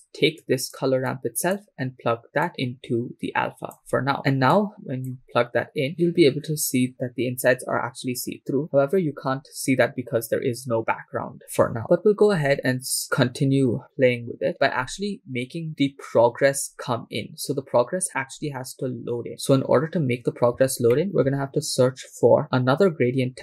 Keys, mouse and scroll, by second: 0.5 click, 1.2 click, 2.5-4.0 drag, 4.5 click, 4.8 click, 6.9 scroll up 5, 8.6 scroll down 3, 20.9 middle click.